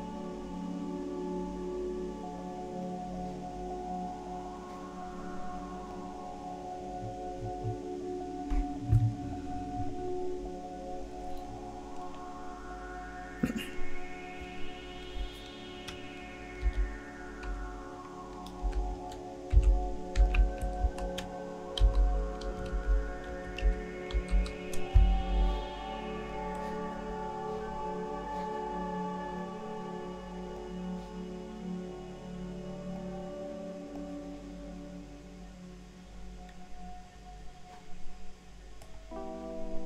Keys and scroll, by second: 16.6-17.5 typing, 18.6-24.8 typing.